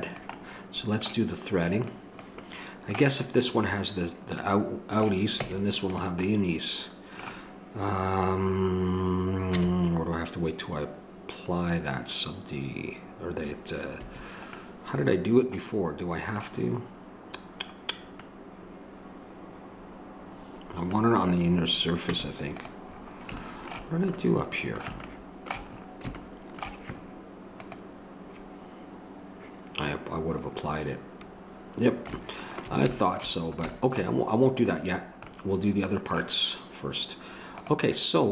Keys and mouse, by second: 2.2-3.5 drag, 3.5-5.4 middle drag, 5.4 Tab, 9.6 Tab, 22.1 Tab, 27.6-38.3 drag, 36.2-38.3 right drag.